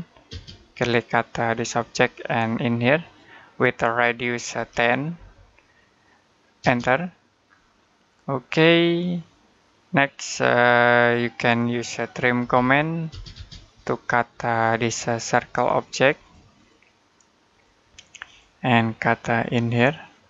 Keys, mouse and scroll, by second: 0.0-0.1 typing, 1.6 click, 4.4-5.0 typing, 6.4 space, 10.9 space, 11.3 middle click, 12.2-12.9 typing, 14.5 click, 15.5-16.0 scroll up 1, 16.0 click.